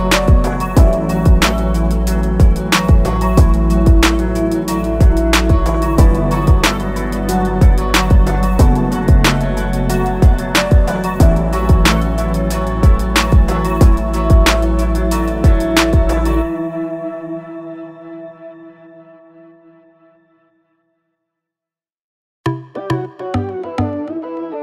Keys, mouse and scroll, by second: 0.0 click, 2.8 click, 7.4 a, 7.6 click, 10.2 i, 10.6 click, 14.2 click, 17.0 click, 17.8 a, 18.1 click, 20.8 scroll up 1, 23.4 click.